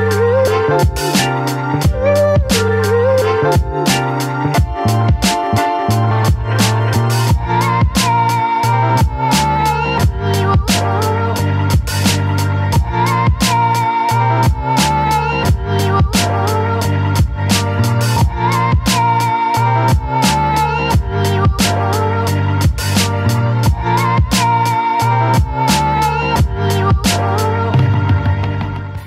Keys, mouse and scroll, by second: 0.7 shift+click, 1.6 shift+click, 2.1 shift+click, 3.5 shift+click, 6.2 shift+click, 7.6 shift+click, 9.6 shift+click, 13.9 right click, 21.6 ctrl+d, 22.3 right click.